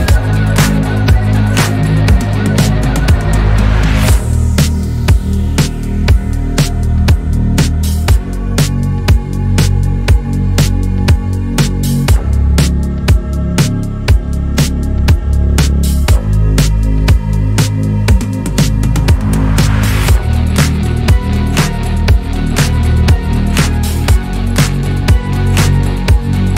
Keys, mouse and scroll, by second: 1.0 ctrl+r, 7.9 alt+click, 8.8 3, 9.9 alt+click, 10.8 alt+shift+click, 15.8 q, 23.2 ctrl+z, 25.1 click, 26.3 q.